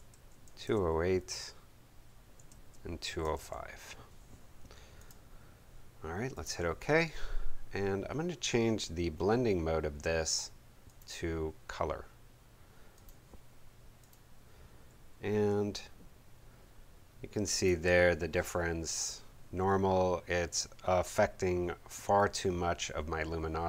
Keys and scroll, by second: 0.2-1.4 typing, 2.3 Tab, 3.0 2, 3.4 0, 4.4 5.